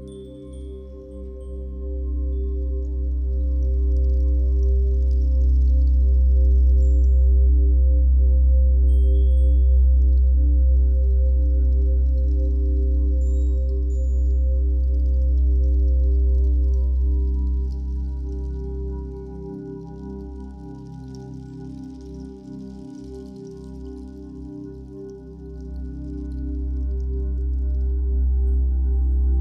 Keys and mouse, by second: 3.2 click, 8.7 click, 9.5 click, 10.6 click, 11.1 click, 11.8-12.4 ctrl+alt+drag, 12.7-16.1 drag, 16.1 alt+g, 17.5 g, 17.9 z, 19.4 click, 19.8-21.0 alt+drag, 21.9 alt+shift+click, 22.7-23.7 ctrl+alt+drag, 24.8 click, 26.0 click, 26.2 click, 27.0 click.